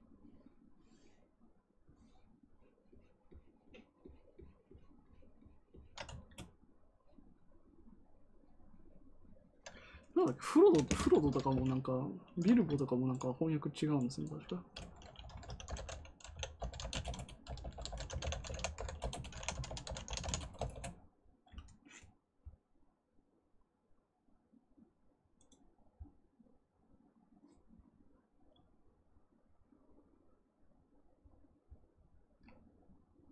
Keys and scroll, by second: 15.1-20.6 typing, 18.9 Return.